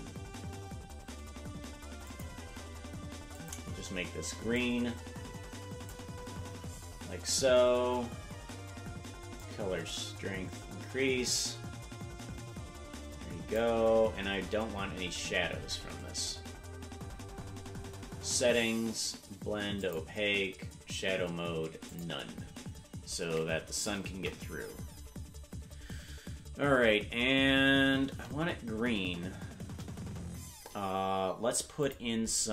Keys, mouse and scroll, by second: 3.3 click, 9.4-13.6 drag, 14.2-15.8 scroll down 29, 17.0-17.6 scroll up 12, 19.8-22.0 drag, 24.0 KP_0, 27.4-28.0 scroll down 10, 29.6 KP_0, 31.8 click.